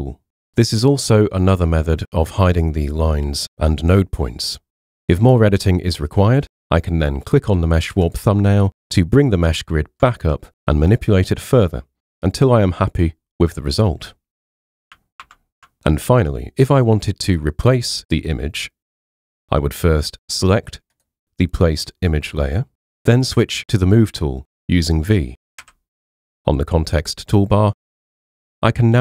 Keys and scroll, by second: 15.2 super+0, 25.6 v.